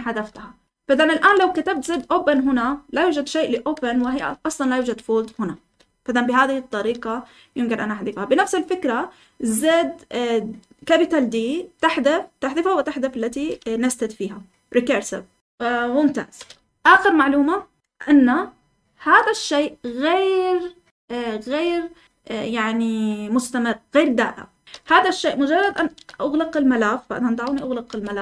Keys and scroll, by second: 0.0-1.8 typing, 2.3 Escape, 3.5-5.9 typing, 7.1-7.8 typing, 17.8 Escape, 18.2-19.0 k, 25.8 typing, 27.4-28.2 typing.